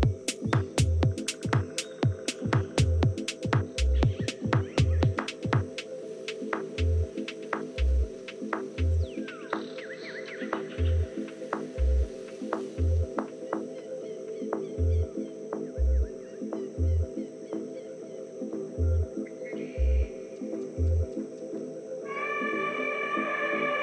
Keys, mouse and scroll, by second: 3.5 KP_1, 4.1 KP_3, 9.6-14.7 middle drag, 20.3-21.5 scroll down 1, 21.5 scroll up 1, 21.5-23.8 middle drag.